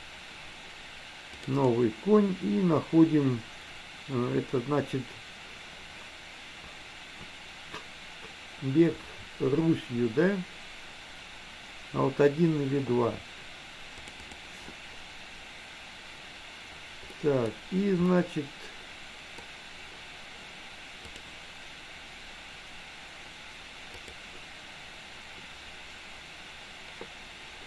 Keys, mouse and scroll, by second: 17.3 middle click, 18.3-19.7 middle drag, 21.1-26.5 drag.